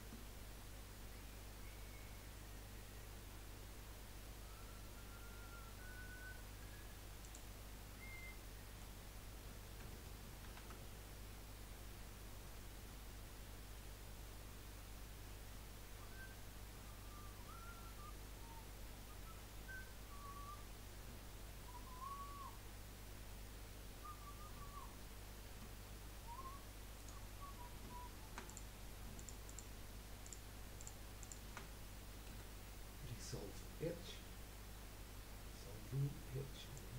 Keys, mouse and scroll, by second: 8.3-10.4 middle drag, 10.4 ctrl+r, 28.6 click, 29.1 alt+shift+click, 29.4 alt+shift+click, 30.2 alt+shift+click, 30.8 alt+shift+click, 31.2 alt+shift+click, 32.3 Delete.